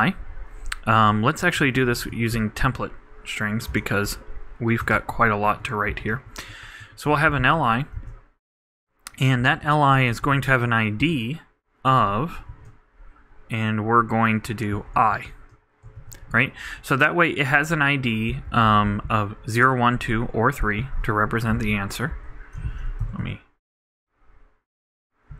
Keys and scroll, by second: 0.0-0.3 typing, 6.9-8.5 typing, 10.7 shift+=, 11.0 shift+', 12.2-13.0 typing, 15.0 shift+\, 15.1 shift+], 16.0 shift+', 16.6 shift+Right, 21.6 super+Left, 22.1 alt+super+Right, 22.6 alt+shift+super+Left, 23.0 shift+super+BackSpace.